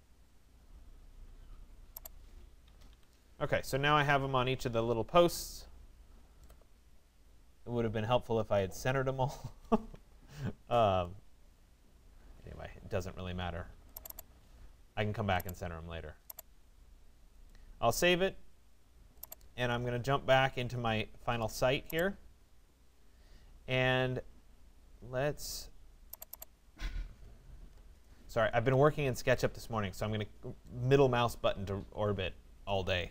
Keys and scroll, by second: 2.3 Escape, 28.2 Escape, 29.4 Escape.